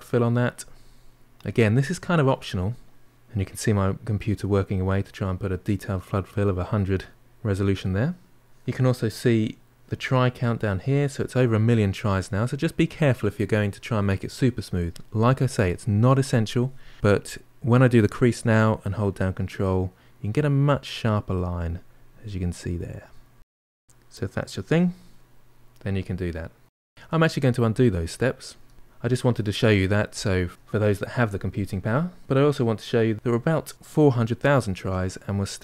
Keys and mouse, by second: 8.4-9.9 middle drag, 12.1-15.1 middle drag, 19.1-23.6 ctrl+drag, 23.6 middle click, 24.1 ctrl+click, 24.9-28.7 middle drag, 31.4 ctrl+z, 32.2-33.5 middle drag, 34.1-35.4 ctrl+middle drag, 35.4-35.6 drag.